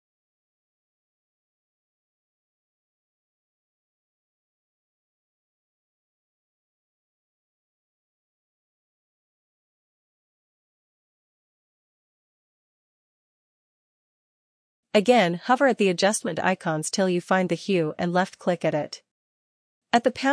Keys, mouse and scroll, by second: 1.2 click, 2.4 click, 2.6 click, 3.9 click, 4.1 click, 18.0 click.